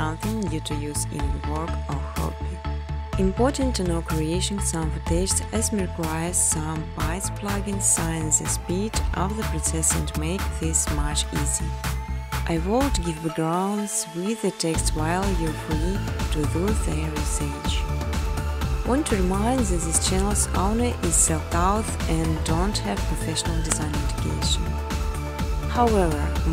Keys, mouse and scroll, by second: 0.9 click, 2.0 click, 3.2 click, 3.4 click, 3.7 click, 4.0 click, 4.3 click, 4.5 click, 4.8 click, 5.0 click, 5.3 click, 5.8 click, 6.7 click, 7.4-7.7 typing, 8.1 click, 8.6-9.5 scroll, 9.5 click, 10.3 click, 10.7 click, 11.4 click, 11.9 click, 12.7 click, 13.4 click, 14.0 click, 14.3 scroll, 15.4 click, 16.0-16.9 scroll, 16.7 click, 17.7-20.0 typing, 18.5 click, 19.1 click, 20.3 click, 21.0 click, 22.0 click, 22.2-23.0 typing, 23.5 click, 25.0 click, 25.7-26.5 typing.